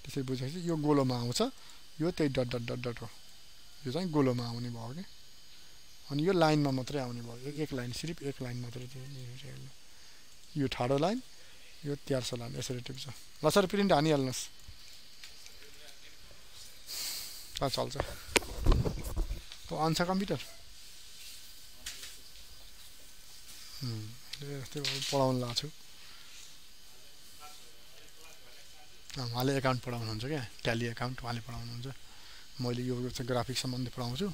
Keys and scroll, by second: 25.7 ctrl+d.